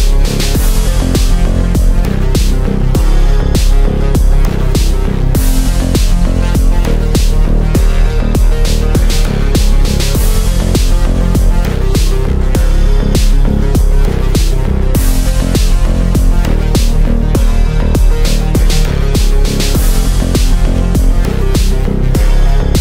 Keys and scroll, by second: 19.5 Delete.